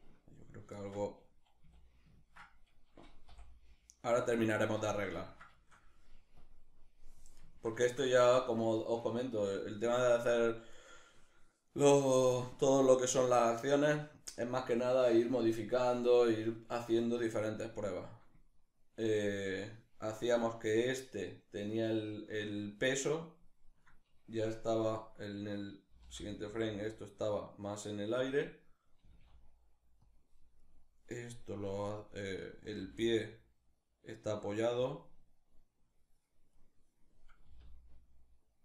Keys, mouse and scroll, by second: 1.2 a, 2.9 i, 6.0-7.2 drag, 7.2-10.4 ctrl+shift+middle drag, 10.4 right click, 13.0-23.4 ctrl+middle drag, 23.4 right click, 25.5 g, 28.0 click, 28.6 g, 29.8 click, 30.2 right click, 31.4 right click, 31.8 right click, 32.4 r, 34.5 click, 36.2 right click, 37.1 r, 38.4 click.